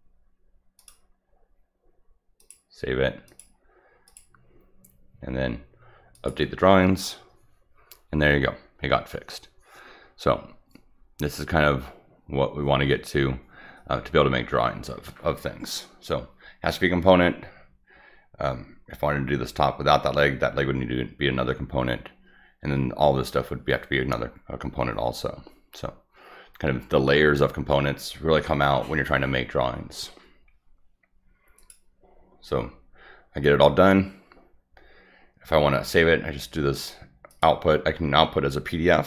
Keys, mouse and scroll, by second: 0.8 click, 2.4 click, 3.3 click, 4.1 click, 6.1 click, 31.6 click, 37.3 click.